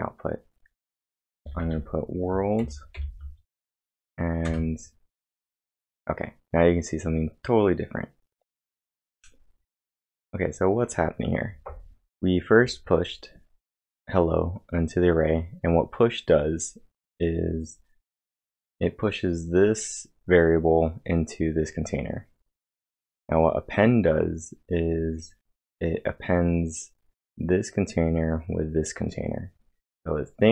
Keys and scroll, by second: 0.0-3.0 typing, 4.5 Return.